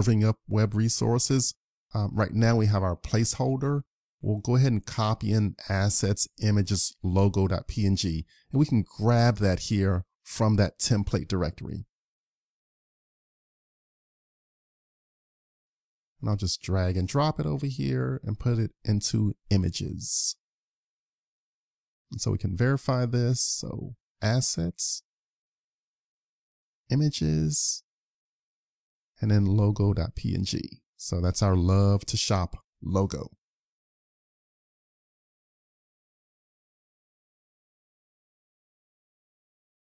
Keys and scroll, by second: 9.1 super+Tab, 9.9 super+Tab.